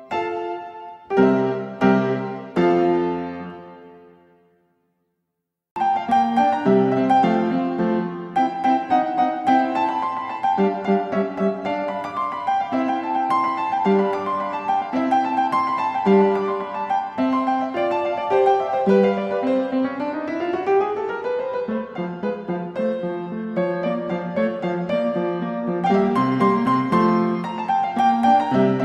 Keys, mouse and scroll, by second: 1.8-3.1 right drag, 5.4-5.7 typing.